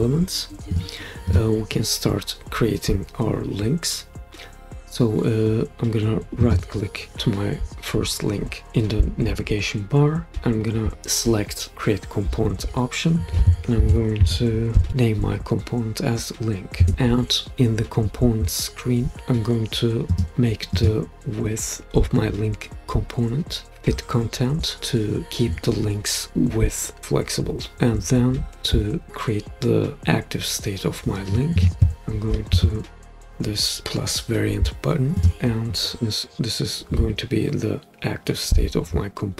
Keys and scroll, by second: 13.5-15.4 typing, 16.8 Return.